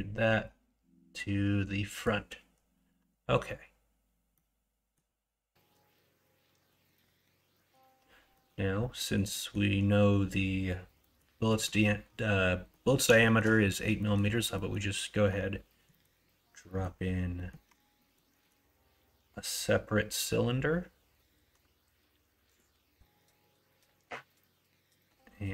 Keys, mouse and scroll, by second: 4.4-4.9 middle drag, 6.7 middle click, 7.5 middle click, 8.4 middle click, 8.9 middle click, 9.3 middle click, 11.1 middle click, 11.4 middle click, 12.8 middle click, 13.3 shift+middle click, 13.7 middle click, 13.9 middle click, 14.6 middle click, 15.9 middle click, 16.7 middle click, 17.4 middle click, 17.6 Tab, 17.9 middle drag, 18.4 shift+a.